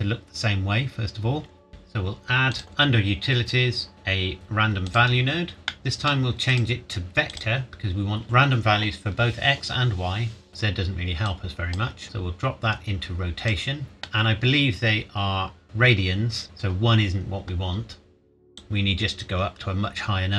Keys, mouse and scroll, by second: 0.7 scroll up 1, 1.7 click, 4.9 click, 5.5 scroll up 1, 5.7 middle click, 6.5 click, 10.5 middle click, 10.6 scroll down 1, 11.3 click, 13.8 middle click, 16.3-17.7 scroll up 1, 18.6 click.